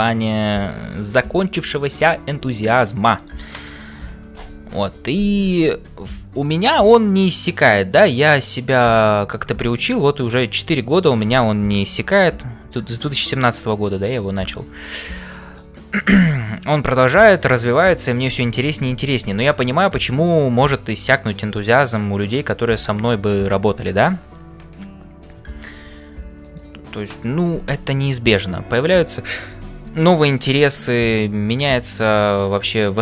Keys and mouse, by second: 0.0-33.0 typing, 0.9 shift+middle click, 3.1 click, 4.4 ctrl+l, 6.1-8.5 middle drag, 9.5 shift+middle click, 14.4-15.8 shift+middle drag, 16.2 shift+middle click, 22.6 shift+middle click, 23.1 middle click, 28.2 middle click, 32.0 shift+right click.